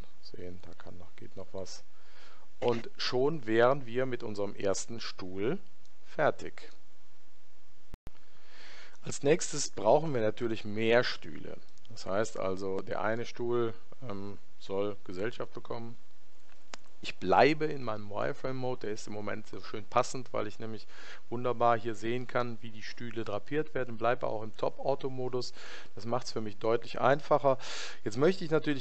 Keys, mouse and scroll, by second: 0.5 click, 5.8-7.7 middle drag, 10.3-13.6 middle drag, 15.5 KP_1.